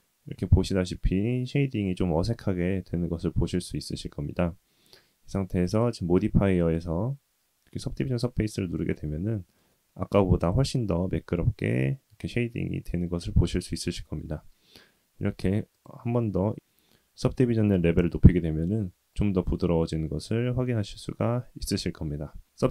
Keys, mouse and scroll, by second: 1.8-3.5 middle drag, 5.6 click, 6.5-8.2 drag, 8.9-9.5 middle drag, 9.6-10.2 middle drag, 10.4 scroll up 2, 11.9-13.7 middle drag, 15.7 click, 18.3-19.1 middle drag, 19.4-20.2 middle drag, 20.2-20.8 scroll down 2, 20.8-21.3 middle drag, 21.7-22.4 middle drag, 22.4-22.7 scroll down 1.